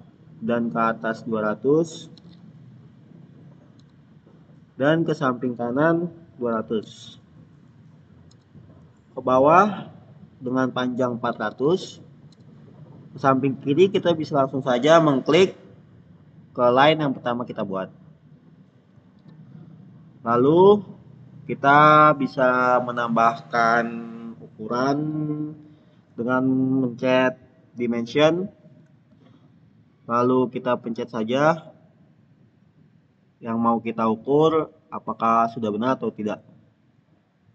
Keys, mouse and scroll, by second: 1.5-2.6 typing, 3.6 Return, 6.4 Return, 6.5-7.3 typing, 8.2 Return, 11.1-12.0 typing, 12.2 Return, 17.6 click, 27.9 click, 31.2 click, 31.3 click, 35.6 click.